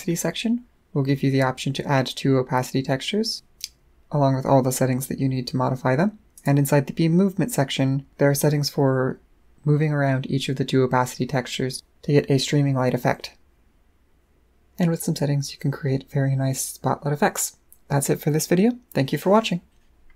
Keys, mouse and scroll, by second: 5.9 middle click, 5.9-6.3 scroll down 2, 6.3 click.